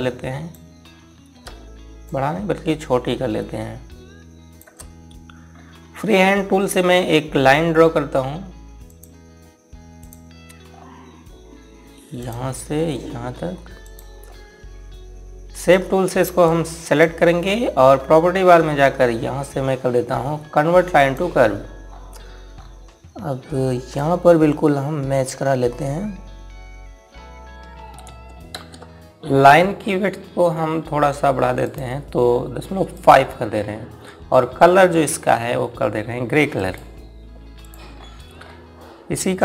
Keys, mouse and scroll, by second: 6.0 scroll down 1, 6.7-7.9 scroll up 1, 9.4 click, 11.2 scroll up 1, 12.7 click, 21.5 click, 22.4 scroll up 1, 24.5 click, 27.5 scroll down 1, 29.1 space, 32.2 click, 37.4 right click, 38.2 click, 38.5 scroll down 1.